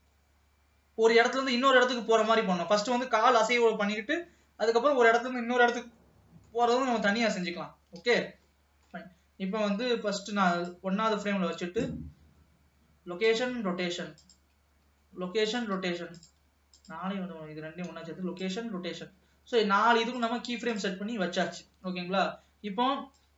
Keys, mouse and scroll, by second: 2.8-4.6 scroll down 2, 4.6 middle click, 5.4-6.6 scroll up 1, 6.6-7.9 middle drag, 7.9-8.4 scroll up 1, 8.4 ctrl+s, 8.7 shift+middle click, 9.2-10.4 scroll up 1, 10.4-10.9 scroll up 1, 10.9-12.3 drag, 14.4 click, 16.3 click, 16.9 shift+click, 19.6 ctrl+s, 20.3 shift+click, 20.8 shift+click, 21.8 ctrl+s.